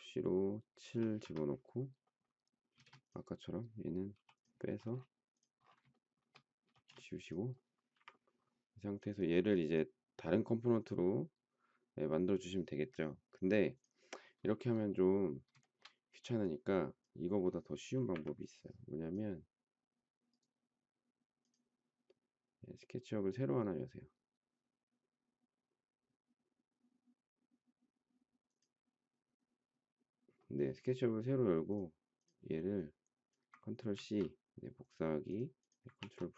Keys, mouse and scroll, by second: 0.9 7, 1.2 Return, 2.7 space, 4.1 p, 5.9 shift+middle click, 6.7 space, 7.9 Delete, 15.6 shift+middle click, 18.1 Delete, 33.9 ctrl+c, 35.9 ctrl+v.